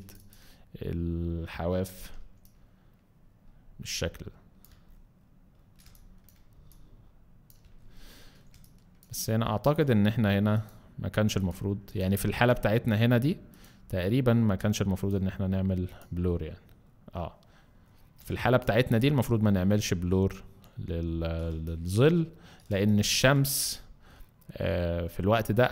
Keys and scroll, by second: 2.2 x, 5.8 alt+space, 6.5 alt+x, 8.5 alt+space, 9.2 alt+space, 18.2 alt+space, 21.5 space, 22.7 space.